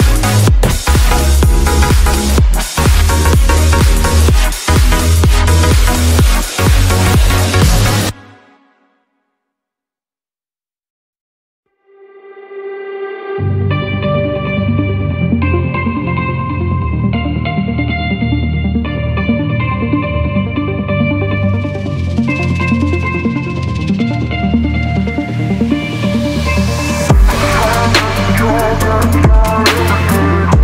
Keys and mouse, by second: 1.4-4.3 drag, 4.6-6.6 drag, 7.0 Tab, 7.5 ctrl+s, 7.8 a, 7.9 a, 9.5 shift+click, 10.1 ctrl+s, 10.3 a, 10.5 a, 13.7 click, 14.9 click, 15.3 click, 16.2-17.9 drag, 20.5 ctrl+s, 20.8 a, 20.9 a, 21.8 a, 22.9-23.4 shift+drag, 25.3 click, 27.9 click.